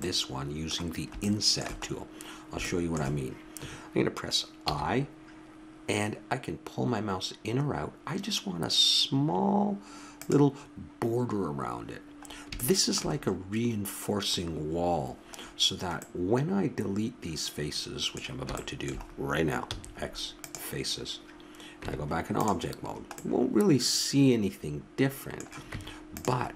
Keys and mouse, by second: 0.0 middle click, 0.2-1.2 middle drag, 2.7-4.5 middle drag, 4.6 i, 12.3-13.6 middle drag, 14.2 middle click, 15.3 middle click, 19.7 x, 21.8 Tab, 22.7 middle click, 25.6 Tab.